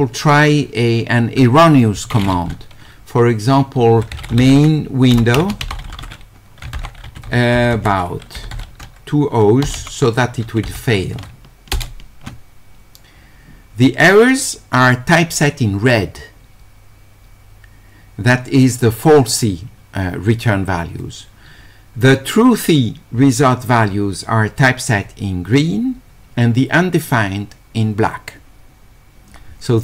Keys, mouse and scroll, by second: 5.8 d, 7.1 q.